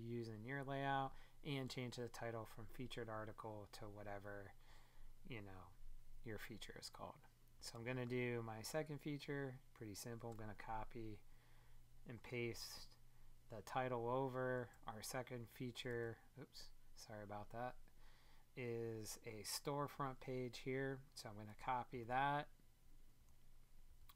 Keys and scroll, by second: 14.7 super+Tab, 15.9 super+Tab.